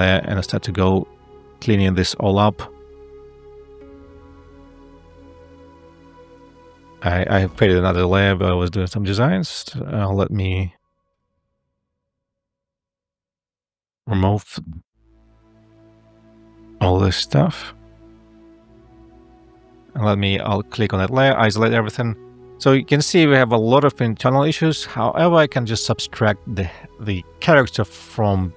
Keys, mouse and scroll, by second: 4.6 ctrl+z, 6.0 a, 9.3 a, 16.2 space.